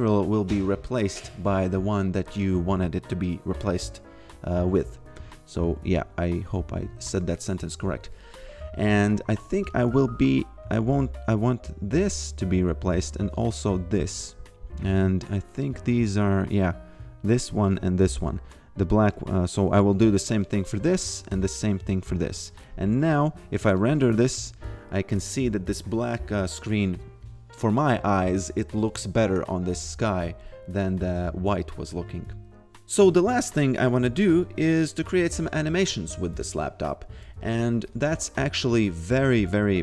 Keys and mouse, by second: 9.6 click, 13.3 click, 15.7 click, 21.2 alt+click, 23.1 click, 33.5 click, 37.9 click.